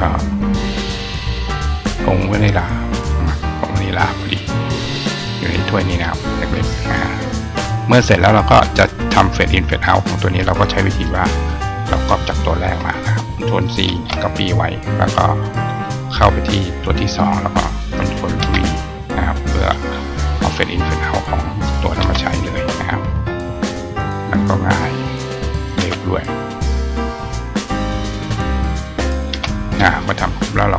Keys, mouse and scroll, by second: 0.8 click, 2.1 click, 8.6 click, 9.6 click, 12.3 shift+click, 16.4 click, 16.5 click, 19.4 click, 20.9 click, 23.1 click, 24.3 click, 25.0 click, 25.2 click, 27.0 click, 28.2 click, 28.5 click.